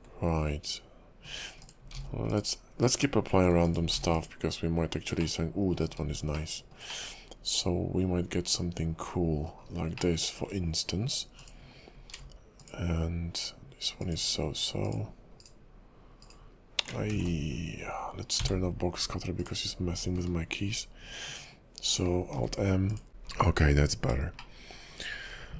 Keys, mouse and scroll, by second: 1.6 click, 1.9 alt+m, 3.1 middle click, 3.6 click, 3.9 alt+m, 5.4 middle click, 6.5 shift+middle click, 7.0 middle click, 9.7 scroll down 4, 10.1 shift+middle click, 11.4 click, 12.1 alt+m, 14.0 click, 15.4 right click, 16.2 right click, 17.3 ctrl+z, 18.4 w, 19.4 click, 22.3 alt+m, 24.5 shift+middle click, 25.2-25.5 scroll up 3.